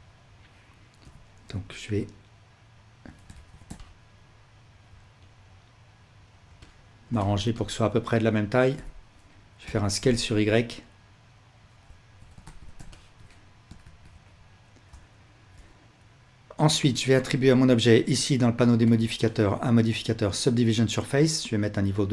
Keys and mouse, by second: 1.0 l, 1.9-6.2 drag, 3.4 alt+z, 6.4-11.8 alt+drag, 8.7 l, 12.4 alt+z, 13.0-13.6 ctrl+alt+drag, 13.8 alt+a.